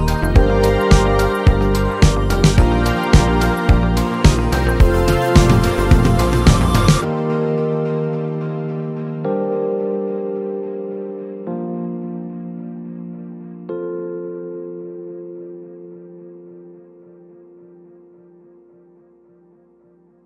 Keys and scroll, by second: 12.6 z, 13.3 space.